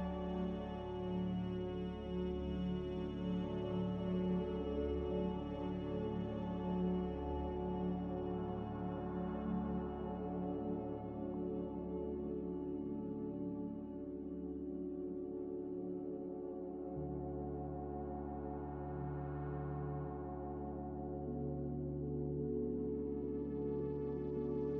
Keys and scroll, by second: 2.5 a, 7.1 7, 18.4 5.